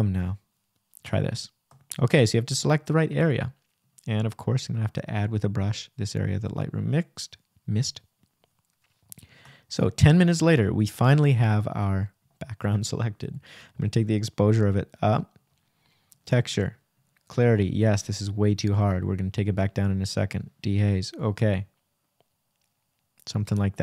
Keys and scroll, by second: 2.2 ', 2.8 shift+;, 16.5 Return, 18.1 \.